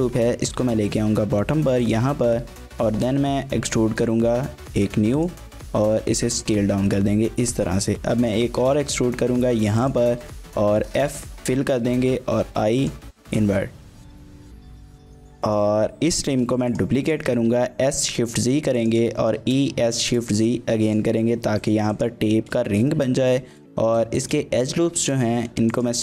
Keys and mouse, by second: 0.0 g, 0.3 z, 1.8 click, 2.1 shift+middle click, 3.2 shift+click, 3.8 e, 4.5 z, 5.2 click, 5.4 s, 6.3 click, 7.9 e, 8.5 z, 9.8 click, 10.6 f, 10.9 middle click, 12.0 i, 12.8 click, 13.2 middle click, 14.0 3, 14.8 alt+click, 15.3 middle click, 16.2 shift+d, 16.7 click, 17.0 s, 17.3 shift+z, 18.8 shift+click, 19.2 e, 19.4 s, 19.7 shift+z, 22.0 click, 22.7 shift+middle click, 22.9 middle click, 23.6 middle click, 23.7 2, 24.2 alt+click, 24.7 alt+shift+click, 25.7 alt+shift+click.